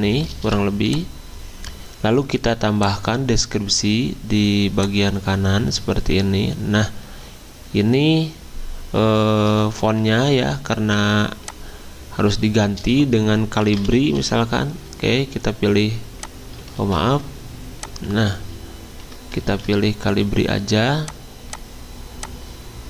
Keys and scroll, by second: 0.1 v, 10.1 ctrl+z, 13.5-14.7 typing, 16.4-17.2 typing, 19.5 ctrl+z.